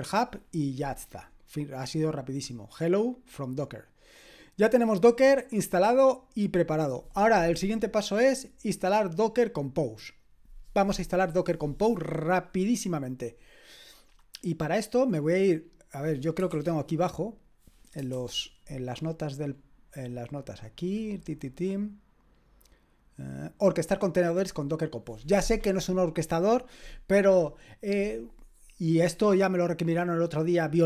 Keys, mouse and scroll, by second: 2.9-4.5 drag, 16.5 shift+g, 17.4-22.5 drag, 18.1 typing, 23.7-30.8 drag.